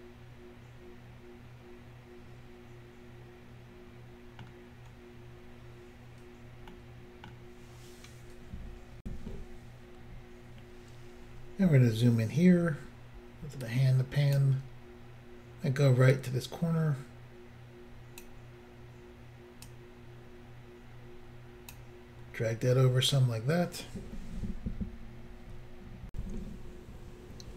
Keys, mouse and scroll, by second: 6.7 middle click, 9.0 Insert, 11.4-12.5 scroll up 3, 13.7 click, 16.1 click, 19.7 click, 26.1 Insert.